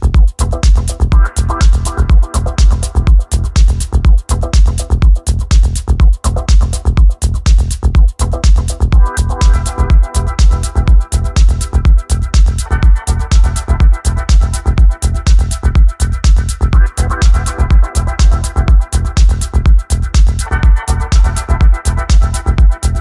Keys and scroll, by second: 4.2 Caps_Lock, 11.2-12.5 typing.